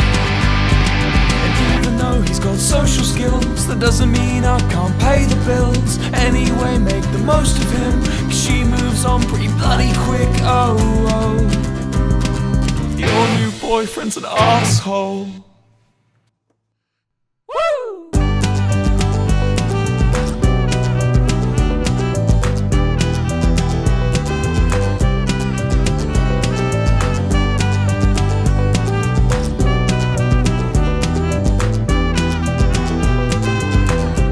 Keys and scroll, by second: 4.3 space, 8.9 space, 18.4 ctrl+space, 19.4 typing, 20.9 Up, 21.1 Return, 24.9 ctrl+space, 26.1 v, 26.9 Return, 34.2 ctrl+space.